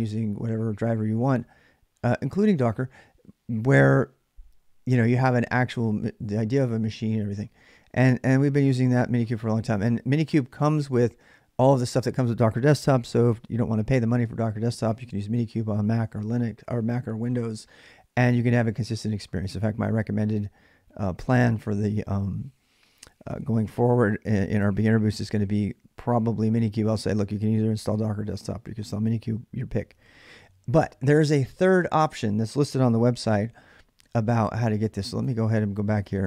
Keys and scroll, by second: 32.9 alt+Tab.